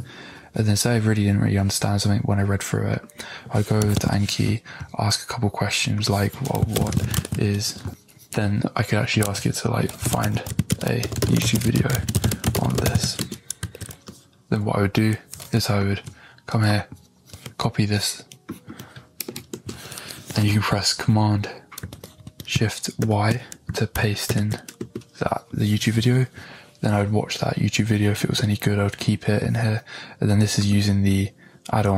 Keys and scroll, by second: 10.5 a, 10.7 space, 11.5 e, 19.2 Right, 23.0 shift+super+y, 24.7 Return.